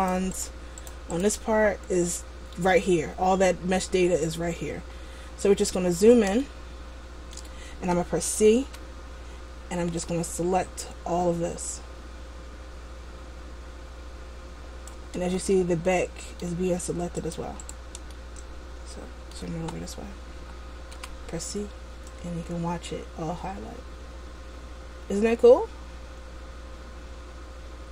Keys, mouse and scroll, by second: 0.2 right click, 0.6 right click, 1.0 right click, 1.4 right click, 4.6-6.6 scroll up 4, 6.6 shift+middle click, 8.7 c, 17.9 right click, 18.2 middle click, 21.1 c.